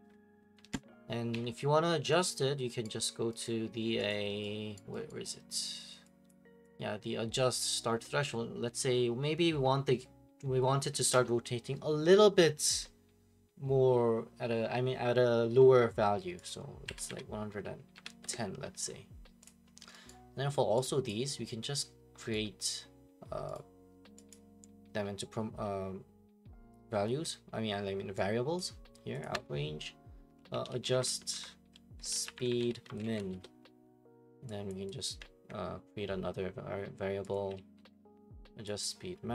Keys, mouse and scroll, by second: 1.3 Escape, 2.3 click, 2.8 right click, 3.0 middle click, 3.1 middle click, 3.5 right click, 4.1 click, 4.8 right click, 5.1 right click, 5.3 middle click, 5.4 middle click, 5.4 middle click, 6.3 click, 7.6 click, 16.5 click, 16.9 1, 17.9-18.3 typing, 19.4 click, 20.1 right click, 21.1 click, 21.8 scroll, 22.2 middle click, 22.3 right click, 23.5 right click, 24.3 click, 28.6 click, 29.2 click, 29.3 F2, 30.3-33.7 typing, 34.8 click, 35.1 click, 37.5 ctrl+d, 38.8 click.